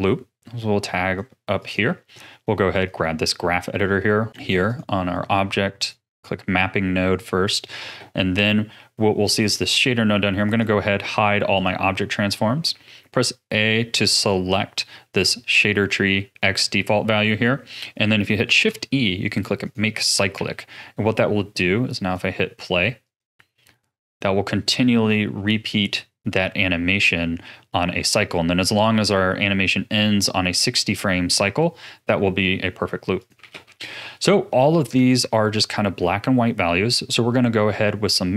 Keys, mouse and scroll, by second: 4.6 click, 5.9 click, 7.4 click, 10.4 click, 11.5 click, 12.7 a, 18.4 shift+e, 20.3 a, 21.5-26.0 drag, 33.1 click, 33.5 ctrl+s, 33.7-36.9 middle drag.